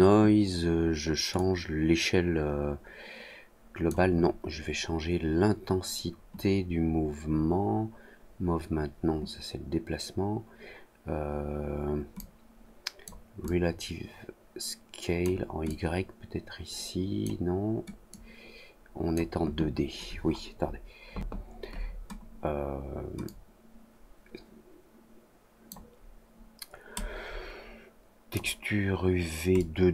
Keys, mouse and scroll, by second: 1.3-3.8 drag, 12.1 click, 13.4-15.1 drag, 15.6-17.2 drag, 18.0-19.1 drag, 23.2-25.6 drag, 26.9-28.3 drag, 29.5-29.9 drag.